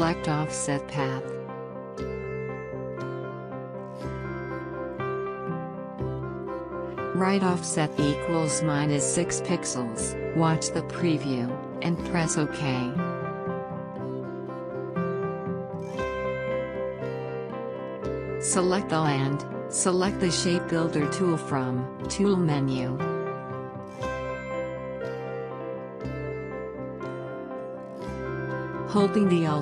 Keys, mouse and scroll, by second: 1.1 click, 7.9-9.3 scroll up 1, 9.3-11.1 scroll down 1, 11.2 click, 17.5 click, 19.4 alt+scroll up 1, 19.9 space, 19.9-23.6 drag, 25.0 click.